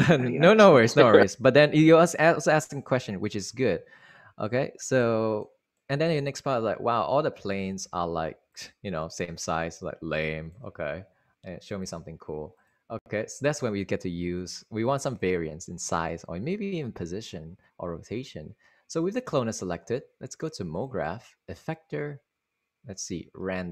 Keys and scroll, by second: 8.3 super+Right.